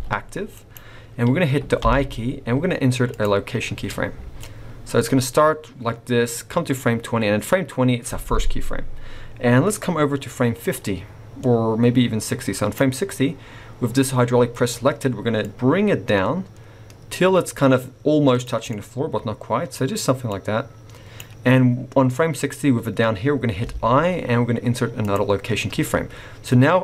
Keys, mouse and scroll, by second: 1.8 i, 4.4 click, 15.4 click, 18.6 scroll up 1, 18.7 middle click, 20.2 click.